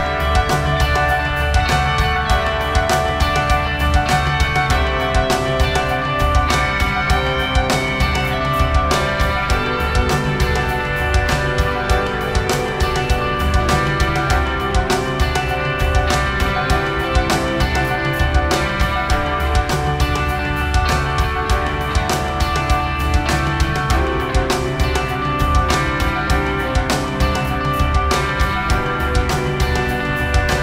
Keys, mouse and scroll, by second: 0.4 g, 1.4 r, 2.0 click, 9.6 g, 10.9-12.7 drag, 11.1 r, 13.0 Tab, 13.6 shift+d, 15.4 Tab, 15.8 s, 17.4 g, 17.8 g, 18.1 r, 21.1 r, 21.8 s, 21.8 g, 23.4 shift+d, 24.7 Tab, 24.9 a, 25.0 a, 25.4 r, 26.6 g, 27.9 click, 28.3-30.0 drag, 28.4 g, 28.8 r.